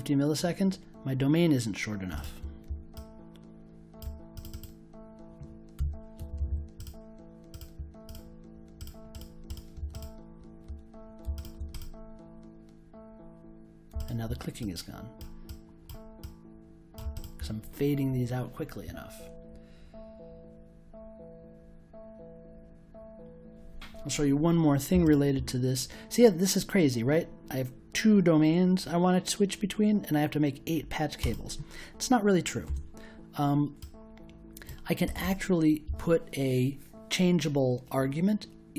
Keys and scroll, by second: 5.7 1, 6.1 0, 32.6 BackSpace.